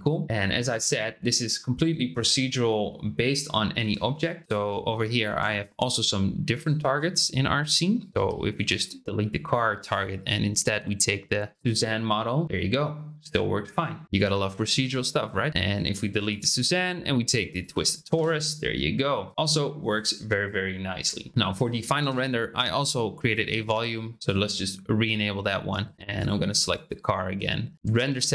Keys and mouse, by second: 3.8 space, 4.8 shift+click, 7.9 shift+middle click, 9.8 click, 12.4 space, 15.6 click, 16.2 click, 18.2 space, 19.3 space, 22.0 space, 23.2 click, 23.8 click, 26.6 click.